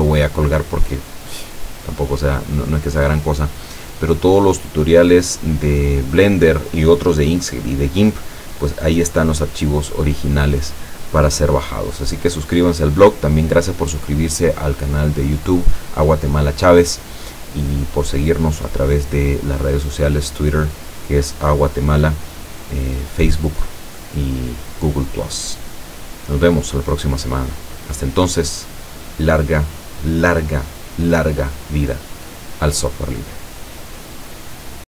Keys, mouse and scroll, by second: 34.8 click.